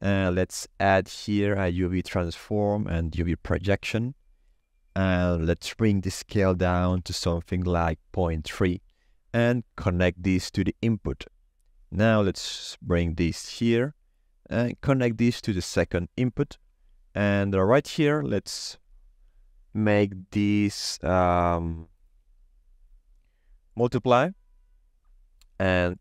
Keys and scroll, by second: 6.4 KP_Decimal, 6.7 3, 6.8 Return.